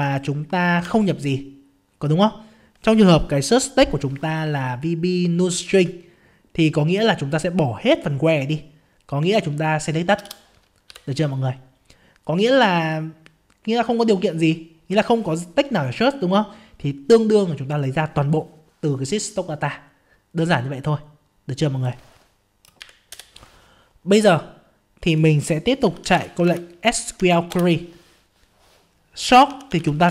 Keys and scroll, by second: 0.8 ctrl+v, 26.4 ctrl+space.